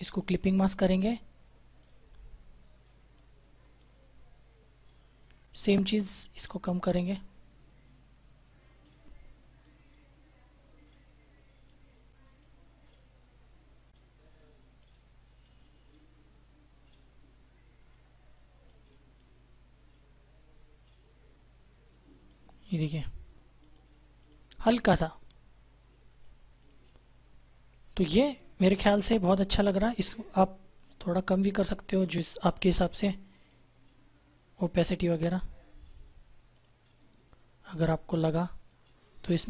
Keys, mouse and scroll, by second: 30.7 click, 34.8 click.